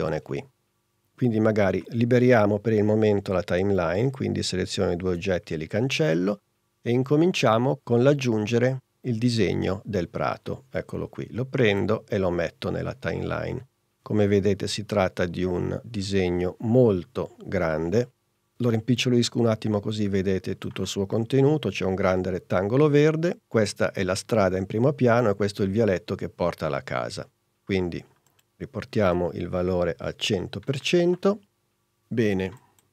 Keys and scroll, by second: 6.0 BackSpace, 18.9 s, 29.2 i, 29.8 0.